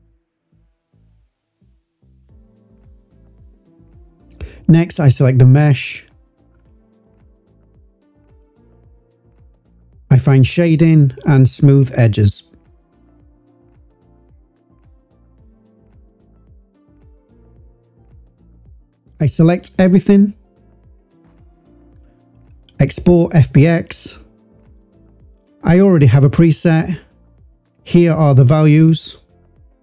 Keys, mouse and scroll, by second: 1.6 ctrl+z, 2.2 click, 2.2 a, 3.1-3.6 drag, 3.9 click, 4.3 click, 6.8 Tab, 8.4-12.7 drag, 14.1 click, 14.9-15.4 drag, 16.4 click, 16.8 click, 17.5 shift+click, 19.6-22.7 drag.